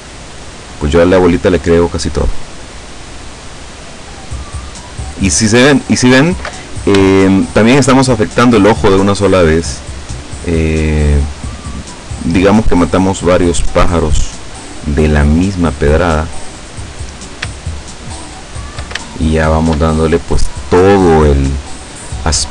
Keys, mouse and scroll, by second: 3.4 scroll down 2, 4.4 scroll down 2, 7.1 shift+middle click, 10.2 right click, 11.6-14.6 drag, 15.1-17.2 drag, 17.6 shift+middle click, 19.2 shift+middle click.